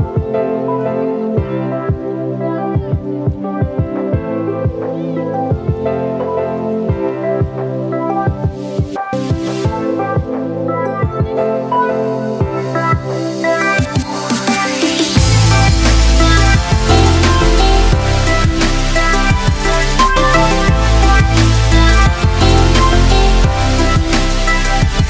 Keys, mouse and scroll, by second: 1.5-13.5 drag, 13.5 ctrl+z, 15.7 space, 17.9 click, 20.1 ctrl+z, 21.6 ctrl+t, 22.6 click, 24.4 ctrl+t.